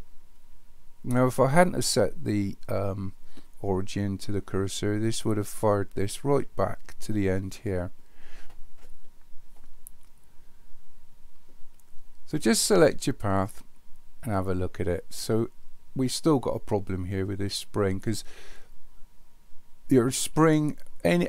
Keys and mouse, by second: 13.3 click.